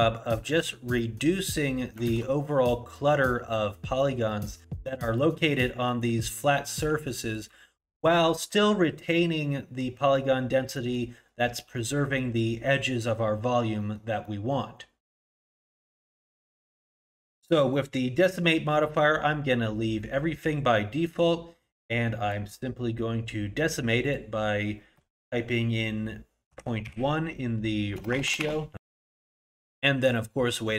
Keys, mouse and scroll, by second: 1.0 middle click, 2.2 shift+z, 3.1 middle click, 3.5 scroll up 1, 4.3 middle click, 4.6 middle click, 5.2 middle click, 5.8 middle click, 6.3-7.2 scroll down 1, 7.2 middle click, 7.2-7.5 scroll down 1, 7.6-8.2 scroll up 3, 8.2 middle click, 8.8 middle click, 10.7 middle click, 11.2-11.8 scroll down 1, 11.8 middle click, 11.8-13.5 scroll down 1, 13.5-13.8 scroll down 1, 13.8 middle click, 14.2 middle click, 17.1 click, 18.8 middle click, 24.1 click, 28.1 BackSpace, 28.2 BackSpace.